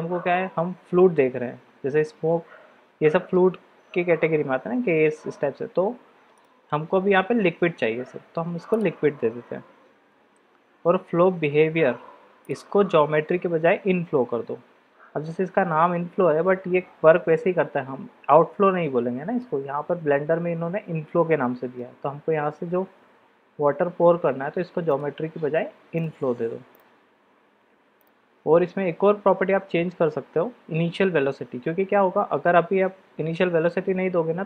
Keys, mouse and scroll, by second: 6.4-8.8 drag, 12.4-16.4 drag, 18.8-19.4 middle drag, 21.3-21.8 middle drag, 25.0-26.0 drag, 26.7-28.0 drag.